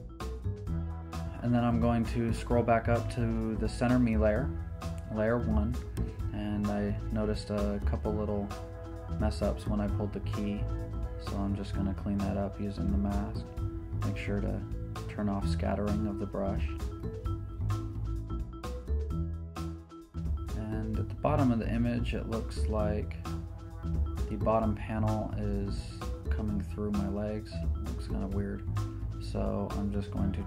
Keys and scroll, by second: 6.6 b, 8.1-9.4 typing, 17.0 super+z, 19.9 z.